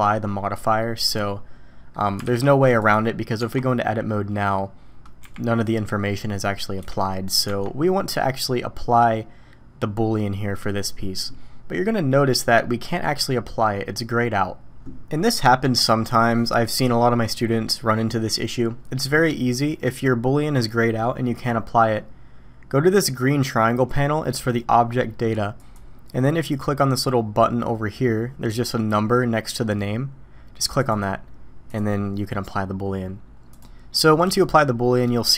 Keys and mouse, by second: 0.8-1.9 middle drag, 2.2 alt+a, 2.8 click, 3.4 Tab, 4.1 click, 5.2 g, 7.4 Tab, 33.5 click, 34.4 click.